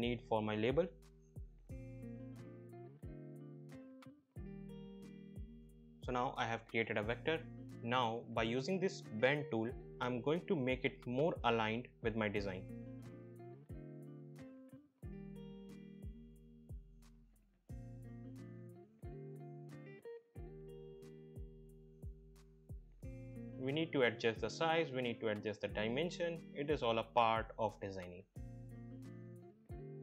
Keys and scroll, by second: 15.4 ctrl+z.